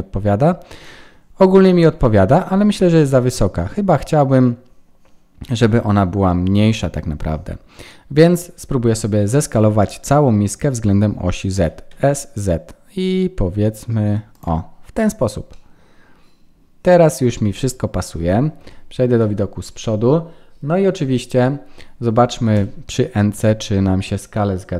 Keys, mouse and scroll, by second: 2.3 Tab, 11.5 s, 15.5 middle click, 18.6 KP_1, 18.6 KP_2, 19.2 KP_1.